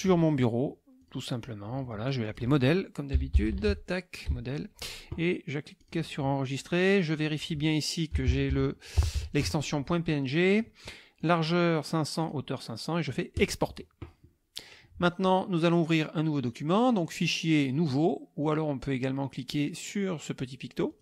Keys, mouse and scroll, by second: 1.0 click, 2.3 click, 2.9-4.3 typing, 5.8 click, 7.2 click, 8.0-9.6 typing, 11.2 click, 12.2 click, 13.3 click, 16.9 click, 18.4 click, 20.9 click.